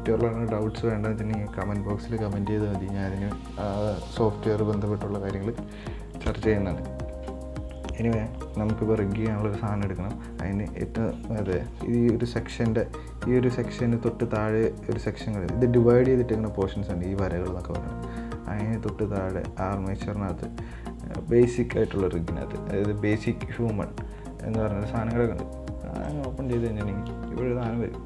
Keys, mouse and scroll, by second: 27.4-27.7 scroll up 3, 27.7-28.0 shift+middle drag.